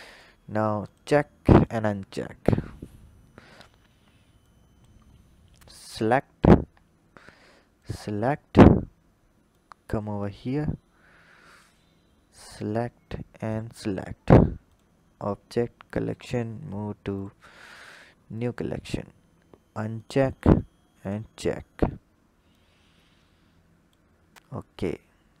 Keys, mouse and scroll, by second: 1.3 click, 4.2 click, 4.9-6.1 scroll up 3, 6.1 click, 7.5 shift+click, 8.1-9.3 scroll down 4, 9.3 click, 12.3 shift+click, 13.3 shift+click, 14.5-17.5 drag, 19.8 click, 20.8 click, 22.3 click, 24.1-24.9 scroll up 1, 24.9-25.4 scroll up 1.